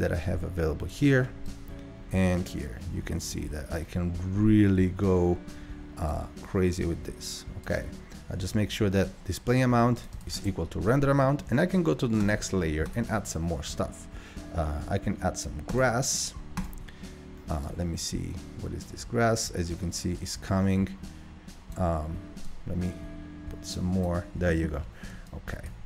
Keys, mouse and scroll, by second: 6.7-16.0 drag, 16.1-21.1 drag, 22.5-25.3 drag.